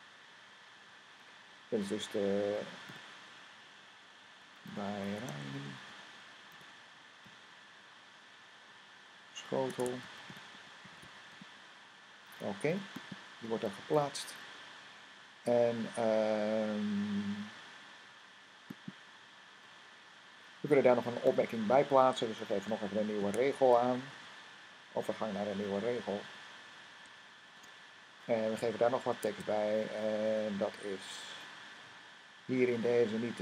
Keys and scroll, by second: 2.8 typing, 4.1-7.1 typing, 9.5-11.7 typing, 23.1-24.0 typing, 27.1-27.9 typing, 29.2 Tab.